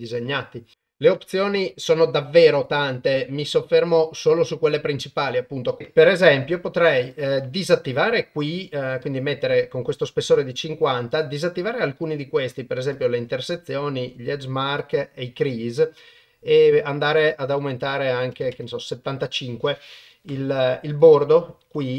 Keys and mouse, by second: 0.7 ctrl+alt+shift+g, 1.7 click, 2.7 click, 4.1 click, 5.8 KP_0, 7.1 click, 11.1 click, 12.9 click, 14.8 click, 17.1-21.6 drag, 21.6 Tab.